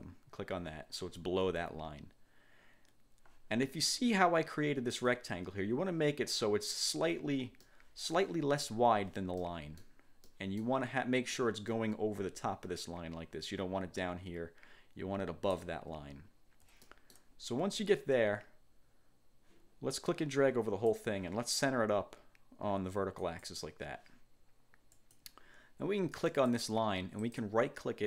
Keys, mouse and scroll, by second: 4.7-5.1 ctrl+scroll up 2, 7.7 click, 9.5 click, 10.3 click, 11.8-15.9 drag, 16.1-16.5 ctrl+scroll down 2, 16.9 ctrl+click, 17.8 1, 20.1 click, 23.4 click, 25.1 click, 26.4 click, 27.4 click.